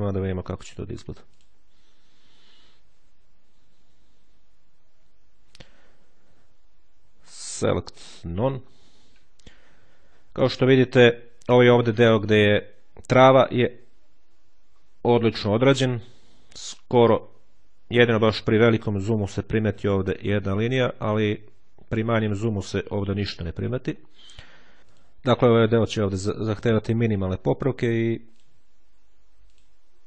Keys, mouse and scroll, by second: 1.1 click, 7.4 click, 8.2 click, 10.4-10.8 ctrl+scroll up 2, 14.6-15.0 ctrl+scroll up 2, 15.8-16.4 ctrl+scroll up 2, 21.4-22.2 ctrl+scroll down 1, 24.5 ctrl+scroll up 1, 24.8 click, 27.7 ctrl+click, 29.4 click.